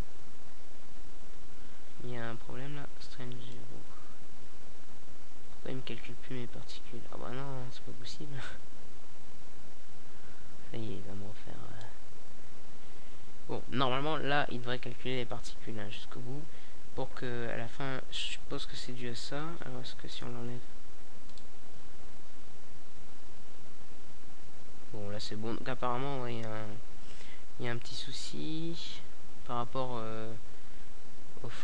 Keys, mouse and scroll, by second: 0.4 alt+a, 6.7 alt+a, 8.2 Delete, 9.5-11.2 drag, 10.0 alt+a, 20.8 alt+a, 25.7-30.5 drag, 30.5-31.6 right drag.